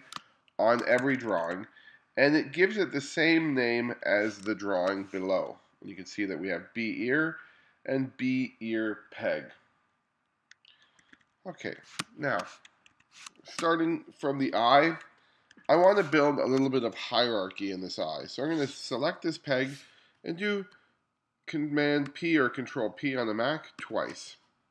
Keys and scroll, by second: 0.2 space, 1.0 2, 4.5 space, 11.1 1, 12.0 space, 13.0 2, 13.3 space, 15.6 2, 16.2 space, 22.1 super+p, 23.8 super+p.